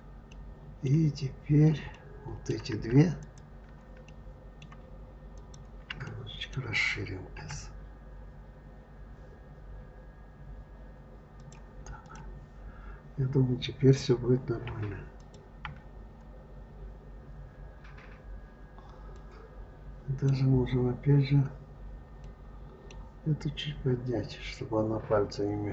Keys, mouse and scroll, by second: 0.2-3.0 middle drag, 3.0 click, 3.9-5.2 middle drag, 5.2 shift+click, 5.9-7.2 middle drag, 7.2 s, 11.9 click, 14.5 KP_Divide, 15.0 click, 15.5 KP_Divide, 16.3-17.2 scroll down 3, 18.0-19.0 scroll down 3, 19.0-22.0 middle drag, 22.1-24.5 middle drag, 24.5-25.7 scroll up 1.